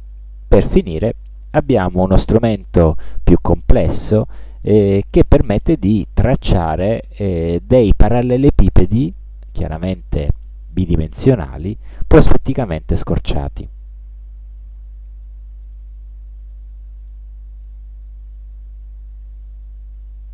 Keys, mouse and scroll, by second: 13.7-16.8 drag, 17.2 ctrl+click, 18.1 ctrl+scroll down 1, 19.7-20.3 drag.